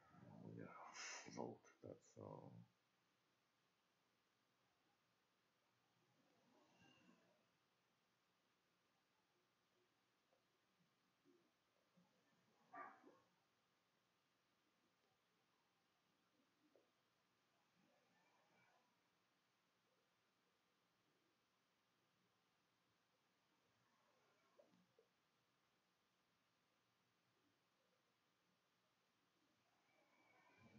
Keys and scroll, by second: 1.9-4.4 typing, 6.8-10.6 typing, 11.6-13.0 typing, 14.1-15.7 typing, 17.4-19.9 typing, 21.5-22.7 typing, 27.9 Escape, 28.5 Tab.